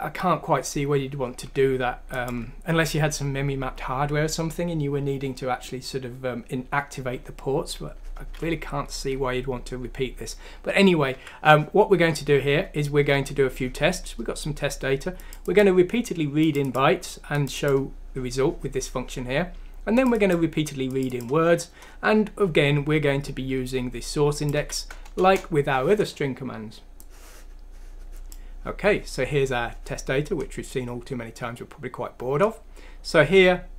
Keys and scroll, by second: 11.2 F6, 13.2 Escape, 24.6 F6, 25.2 Return.